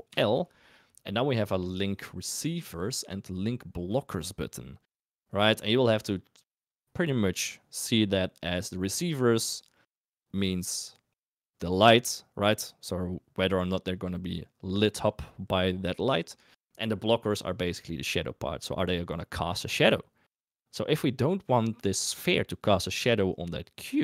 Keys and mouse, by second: 0.0 ctrl+l.